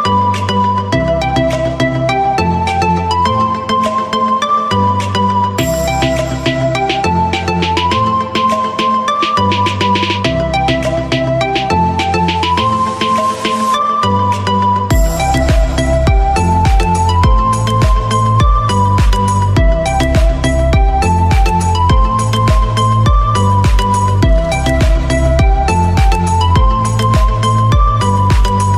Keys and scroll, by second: 14.5 alt+Num_Lock.